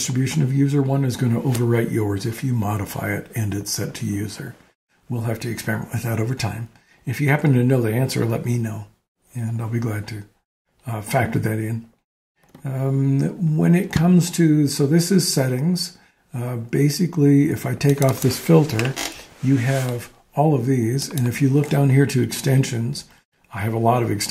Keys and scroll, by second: 19.0 BackSpace.